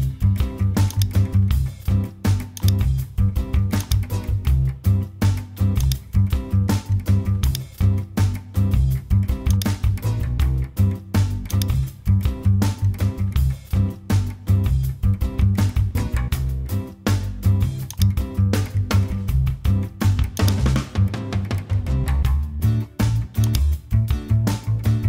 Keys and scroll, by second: 8.4 super+t, 16.1 Return.